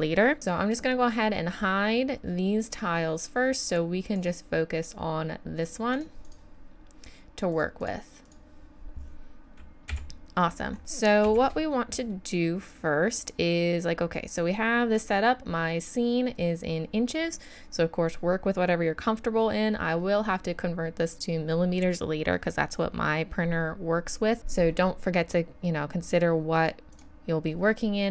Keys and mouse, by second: 4.2-5.6 middle drag, 6.1-9.2 drag, 9.9 KP_1, 11.2 shift+c, 26.9-28.1 drag.